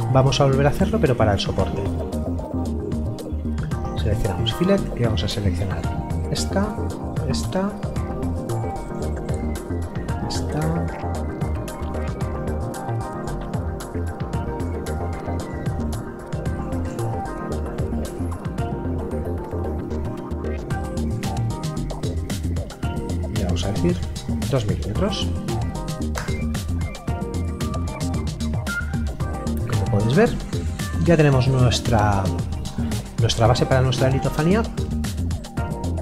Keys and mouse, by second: 2.7 click, 8.9 middle click, 10.8 click, 16.9 middle click, 19.4 click, 23.9 KP_2, 27.4 middle click, 32.8 middle click.